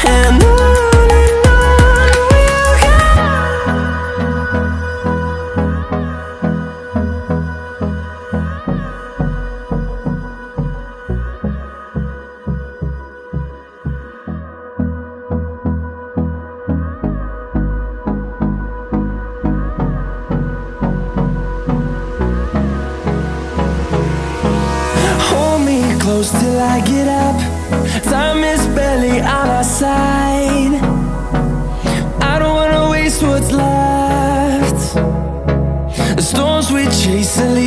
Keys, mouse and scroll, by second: 0.2 middle click, 0.7 click, 1.4 click, 3.2 click, 5.1 right click, 5.7 click, 9.1 click, 10.0 click, 11.1 click, 16.1 ctrl+a, 17.7 ctrl+g, 19.0 click, 20.6 click, 21.2 click, 22.7 right click, 26.1 Escape, 28.0 click, 28.5 click, 30.2 right click, 31.5 click, 32.9 ctrl+a, 34.2 ctrl+g, 35.4 click, 36.8 click, 37.4 click.